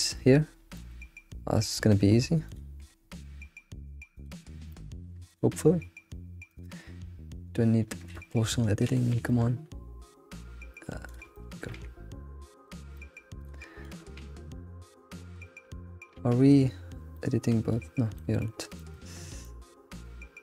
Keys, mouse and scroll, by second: 0.3-0.7 scroll down 1, 0.7 shift+middle click, 1.1-1.6 scroll up 3, 1.7 shift+middle click, 2.1-2.4 scroll up 1, 2.4 click, 2.8 g, 4.4 scroll down 1, 4.7 shift+middle click, 5.3 click, 5.5 g, 8.1 ctrl+z, 8.4 ctrl+z, 11.1 click, 11.3 shift+middle click, 11.7 click, 12.1 g, 12.9 shift+middle click, 13.4 click, 13.8 click, 14.1 g, 16.0-17.2 scroll down 1, 17.2 Tab, 17.2-18.2 middle drag, 18.4 alt+middle click, 19.5 alt+middle click, 20.2 scroll up 2.